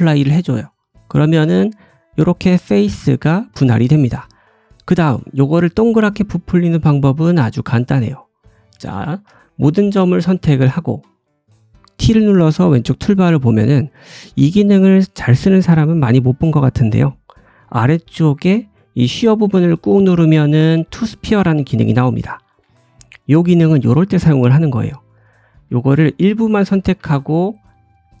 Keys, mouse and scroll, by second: 1.4 Tab, 3.0 click, 3.5 click, 4.0 scroll down 1, 4.2 middle click, 8.9 1, 9.3 middle click, 9.9 a, 9.9-12.3 right drag, 12.5 right click, 12.5 t, 17.8-21.8 drag, 21.8-25.2 middle drag, 25.2 click, 25.7-28.2 middle drag, 27.0 ctrl+z, 27.9 click.